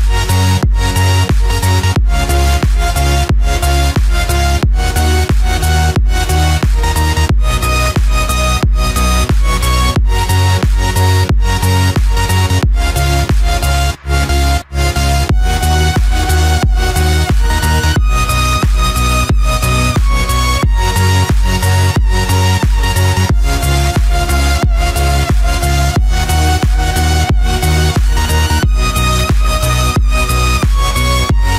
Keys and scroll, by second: 6.2 ctrl+z, 7.8 ctrl+-, 9.3 ctrl+z, 11.6 ctrl+=, 14.8 ctrl+-, 16.3 ctrl+0, 16.8 ctrl+=, 27.7 ctrl+=, 28.2 ctrl+space, 28.7 ctrl+=.